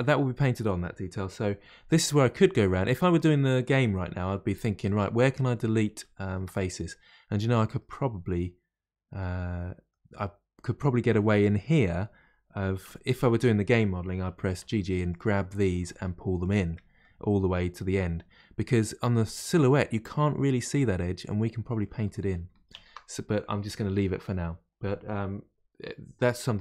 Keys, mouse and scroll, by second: 5.3-6.0 scroll up 3, 6.0-12.8 shift+middle drag, 12.8 1, 13.3 click, 14.6 g, 15.6 click, 15.7 g, 16.7-21.0 middle drag, 22.0 ctrl+z, 22.3 ctrl+z.